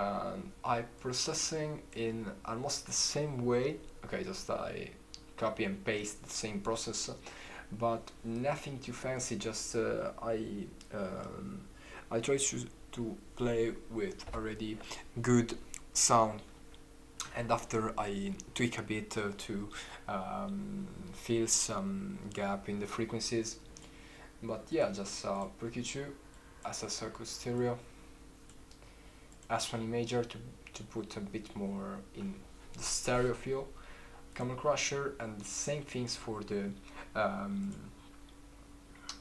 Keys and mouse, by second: 2.6 click, 7.9 click, 8.4-21.9 drag, 23.9 click, 35.0-36.3 drag.